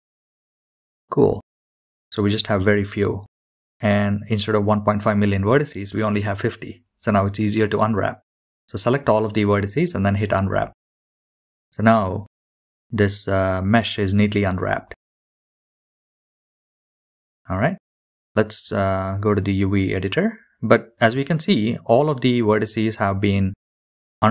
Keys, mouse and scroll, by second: 5.0 a, 6.5-9.2 drag, 11.0-17.9 drag, 17.9 scroll down 1, 18.5-19.8 scroll down 2, 22.4-23.6 middle drag, 22.4-23.1 scroll up 1.